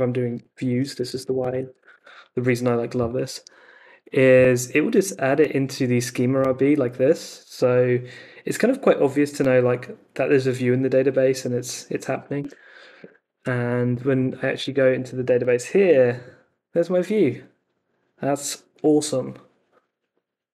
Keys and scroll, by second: 0.8-1.7 typing, 1.7 super+v, 1.9 Return, 12.3 super+Tab, 14.6 super+r.